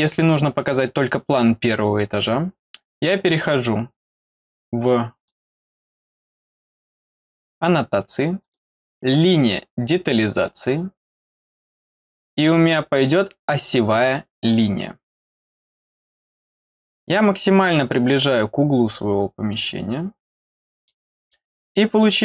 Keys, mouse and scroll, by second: 5.1 click, 8.4 click, 10.3 click, 14.0 click, 15.2 middle click, 16.2 middle click, 16.5 middle click, 16.8-17.4 scroll up 2, 18.2-18.5 scroll up 1, 19.5 click, 20.2-20.8 scroll down 4, 20.8 middle click, 21.3-21.9 scroll down 3.